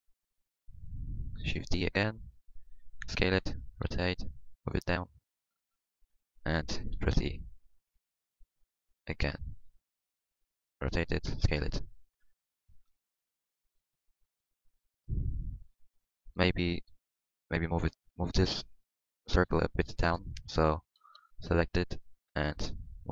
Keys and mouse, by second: 1.8 shift+d, 3.0-5.9 typing, 6.9 e, 9.7 r, 10.5 r, 10.6 s, 11.9 click, 14.2 middle click, 15.1 click, 15.4 middle click, 16.3 z, 19.0-20.4 middle drag, 20.4 Tab, 20.8 Tab, 21.0 z.